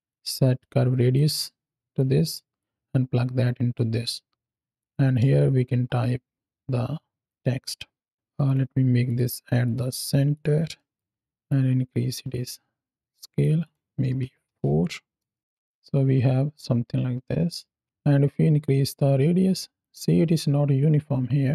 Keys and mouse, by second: 0.5-1.0 drag, 1.3 click, 2.4-3.6 drag, 4.6-6.4 drag, 7.2 KP_7, 8.3-9.1 drag, 9.5-10.3 drag, 10.6 middle click, 11.4-13.4 drag, 13.5 click, 15.2 shift+middle click, 15.5 space, 17.6 space, 18.5-19.7 drag.